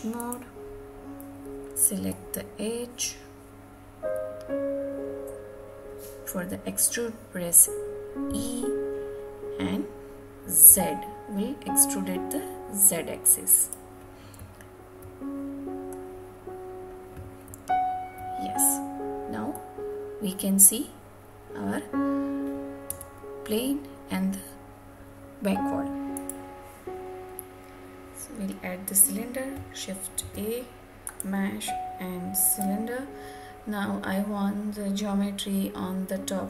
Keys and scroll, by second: 22.8 Tab.